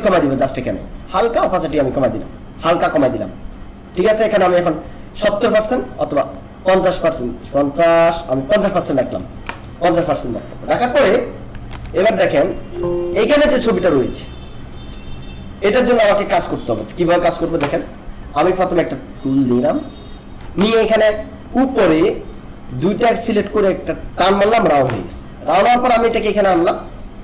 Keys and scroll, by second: 11.7 ctrl+-, 12.5 alt+space, 19.4 shift+space.